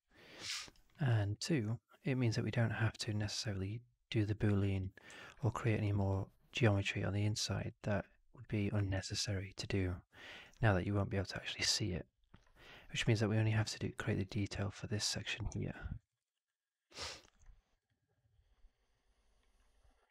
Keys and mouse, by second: 0.5 alt+right drag, 0.8 alt+middle drag, 1.0 alt+right click, 1.2 alt+click, 4.7-5.2 drag, 5.3 drag, 5.6 right drag, 5.8 right drag, 6.0-6.6 drag, 7.6 right drag, 7.8-8.7 drag, 8.8 alt+right drag, 9.0 alt+right drag, 9.2-10.4 alt+drag, 11.9-12.3 alt+drag, 12.6-12.9 drag, 13.0-13.5 alt+drag, 15.6 alt+drag, 16.0 alt+middle click, 16.2 alt+right drag, 16.4-16.9 alt+drag, 17.0 alt+right drag, 17.8-20.1 drag.